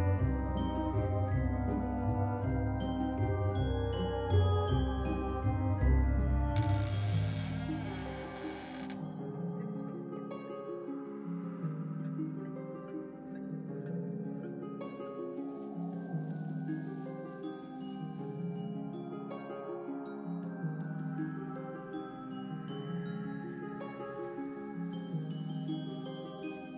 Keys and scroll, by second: 1.3 ctrl+c, 1.5 ctrl+v, 2.5 ctrl+c, 2.7 ctrl+v, 3.7 ctrl+c, 3.9 ctrl+v, 4.8 z, 7.3 alt+x, 10.4 z, 14.5 z, 16.3 alt+x, 18.7 z, 21.3 z, 22.8 alt+x.